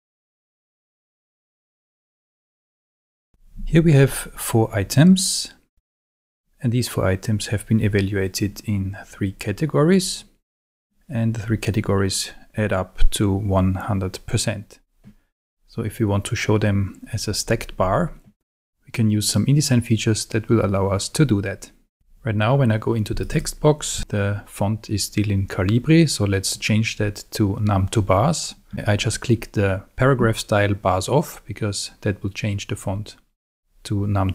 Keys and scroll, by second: 24.0 super+a.